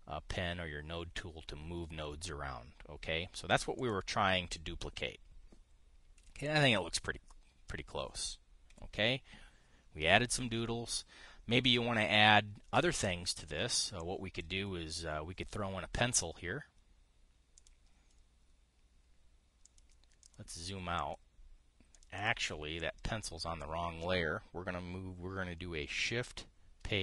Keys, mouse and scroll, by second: 4.5 click, 6.9 Delete, 7.8 click, 9.4 KP_5, 14.7 click, 18.3 click, 20.4 click, 20.9 click, 21.7 click, 22.6 click, 23.5 click.